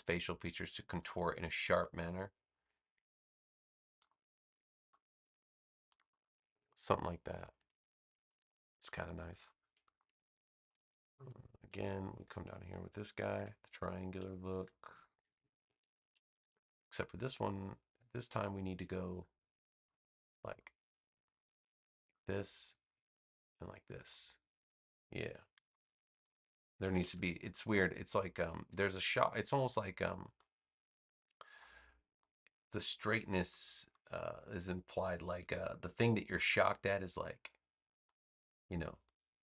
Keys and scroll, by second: 7.5 space, 13.3 v, 14.4 super+c, 14.8 space, 16.3 super+v, 19.0 a, 25.5 v.